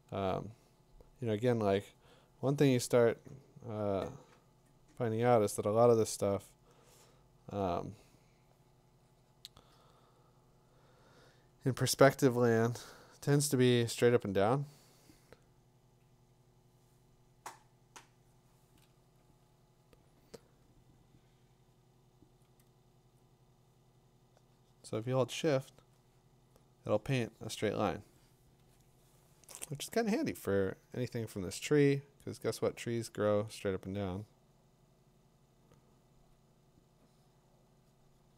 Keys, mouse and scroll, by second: 7.6-20.0 drag, 7.6 typing, 22.2 click, 28.6 z, 33.3 click.